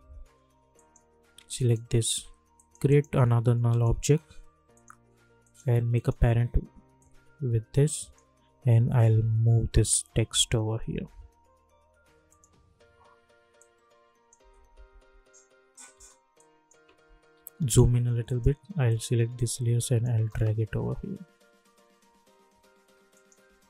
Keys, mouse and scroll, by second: 0.7 click, 1.5 shift+click, 2.9 right click, 3.7 click, 5.9 shift+click, 7.3-7.9 drag, 8.9 Right, 12.2 click, 14.3 space, 16.3 click, 17.3 =, 17.5 =, 18.2 click, 18.8 shift+click, 20.1 space, 23.1 click.